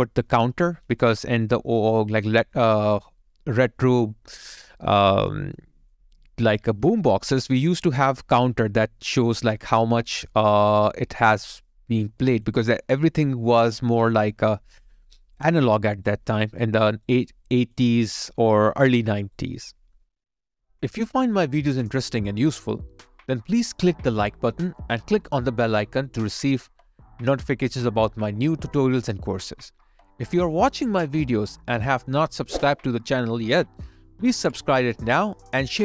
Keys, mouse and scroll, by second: 4.2-4.7 scroll up 1, 4.8 alt+click, 5.5 alt+middle click, 6.1 alt+right click, 7.4 alt+middle click, 11.2 alt+right click, 11.6 alt+middle click, 12.0 alt+click, 12.7 alt+middle click, 14.0 alt+click, 15.8 alt+right click, 16.2 alt+middle click, 16.8 alt+right click, 17.2 alt+click, 18.4 alt+right click, 19.5 alt+middle click, 22.0 alt+click, 32.4 alt+middle click.